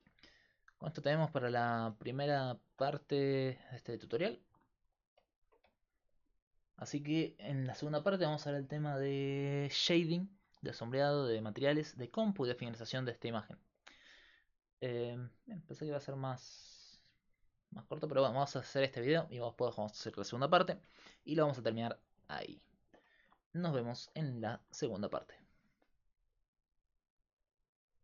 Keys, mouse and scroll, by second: 0.7 right click, 1.0 Tab, 1.8 a, 2.2 a, 2.9 x, 4.1-5.2 middle drag, 5.4 Tab, 9.4 middle click.